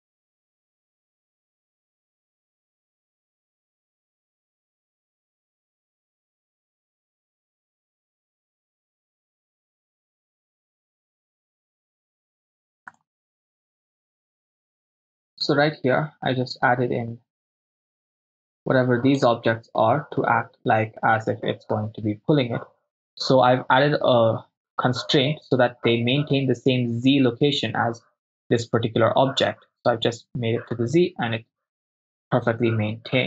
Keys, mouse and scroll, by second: 0.0-2.0 typing, 0.4 ctrl+click, 1.7 ctrl+z, 1.7 ctrl+click, 2.1 ctrl+click, 2.9 right click, 3.0 shift+click, 3.0 shift+right click, 3.3 click, 4.3 click, 4.9 ctrl+middle click, 5.0-6.0 drag, 6.2 right click, 6.4 click, 7.3-12.2 drag, 12.9 click, 14.3-19.4 drag, 32.1-33.2 drag.